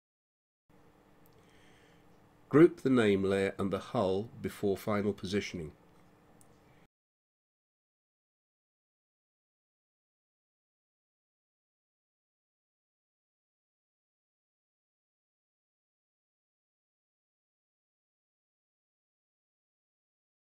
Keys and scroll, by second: 16.7-18.5 typing, 19.9 Return.